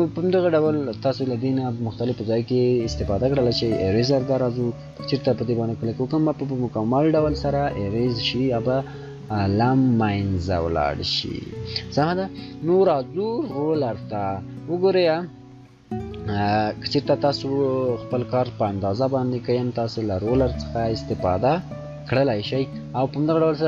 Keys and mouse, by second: 3.5-7.2 shift+drag, 13.1 shift+click, 19.6 click, 19.6-23.0 shift+drag.